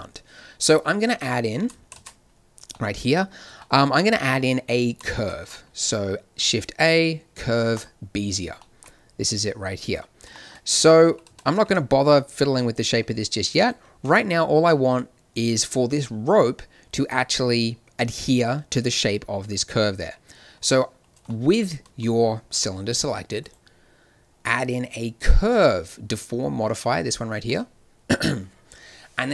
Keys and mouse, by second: 2.1 shift+z, 2.7 click, 4.9 shift+a, 11.2 z, 11.6 Tab, 12.4 Tab, 13.9 z, 18.3 z, 19.4 z, 21.8 z, 22.5 z, 24.9-25.4 drag.